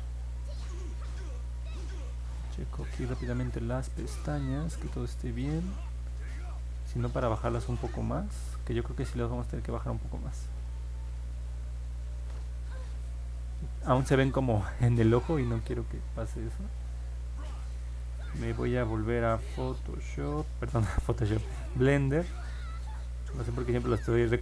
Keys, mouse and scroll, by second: 0.7 middle click, 2.0-7.6 alt+drag, 7.9 middle click, 8.4 middle click, 9.1-12.3 alt+drag, 12.7 middle click, 13.9-15.5 alt+drag, 16.8 click, 21.6 click, 22.4 click.